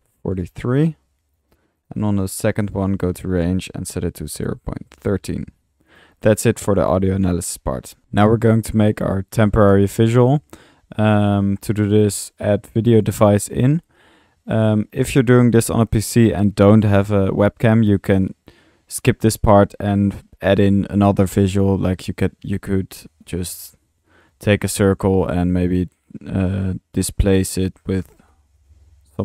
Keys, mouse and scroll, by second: 1.6-2.6 typing, 1.8 click, 2.2 drag, 2.6-2.9 drag, 3.2-3.6 drag, 5.7-6.4 typing, 5.9-6.2 drag, 6.3 click, 7.0-7.4 middle drag, 8.0 Delete, 8.0-8.3 drag, 9.8 Tab, 11.8-12.5 typing, 13.0-13.3 drag, 13.4 click, 18.0-18.3 drag, 19.5 middle click, 23.0-23.7 typing, 24.5 Tab, 24.5 drag, 24.9 click, 25.8 Tab, 26.4-26.8 drag, 27.0 click, 27.4-29.2 typing.